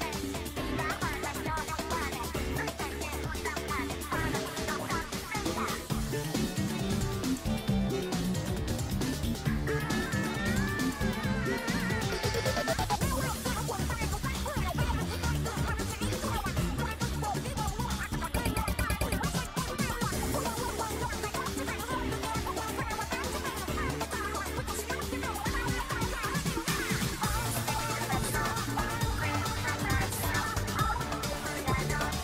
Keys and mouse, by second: 0.7 click, 4.8-6.8 drag, 8.9 click, 14.0 shift+click, 16.1-18.8 drag, 19.6 click, 20.5 click, 21.5 click, 22.2 click, 24.0 click, 26.7-29.2 drag, 29.9 click, 30.5 click.